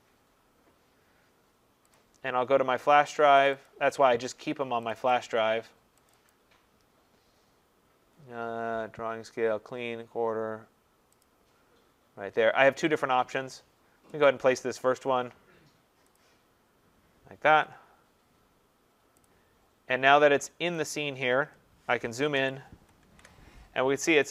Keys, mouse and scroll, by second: 3.5 click, 3.7 click, 4.9 click, 5.1 click, 6.1 click, 6.3 click, 11.2 click, 14.3 click, 16.2 click, 19.2 click, 20.9 click, 22.4 ctrl+=, 22.7 ctrl+=, 23.1 ctrl+=.